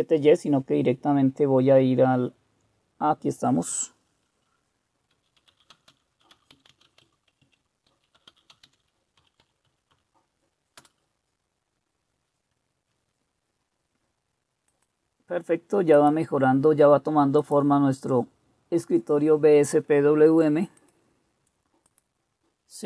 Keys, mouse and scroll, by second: 5.2-10.5 typing, 10.8 Return.